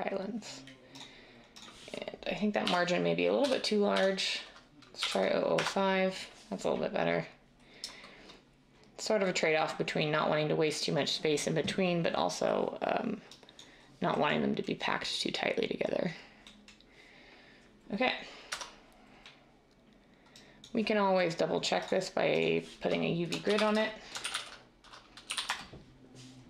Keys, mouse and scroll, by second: 2.6-3.9 typing, 5.0 typing, 5.6 Return, 7.7 typing, 18.5 Tab, 23.4-25.4 typing, 25.5 Return.